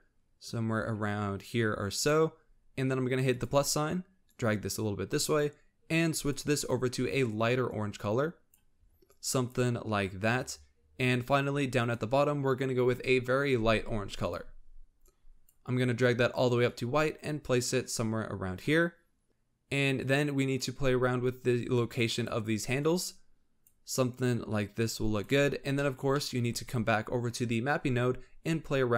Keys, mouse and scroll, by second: 3.3-6.3 drag, 6.5 click, 11.8 click, 19.3 scroll up 2, 20.0-25.5 drag, 25.5 scroll down 3, 25.8 middle click, 26.5-28.9 scroll up 2.